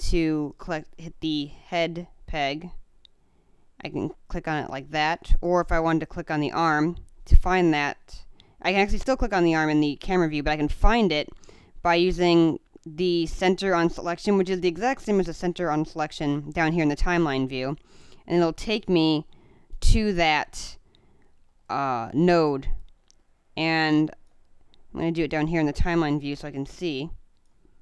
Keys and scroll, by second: 1.6 space, 4.2 space, 23.9 space.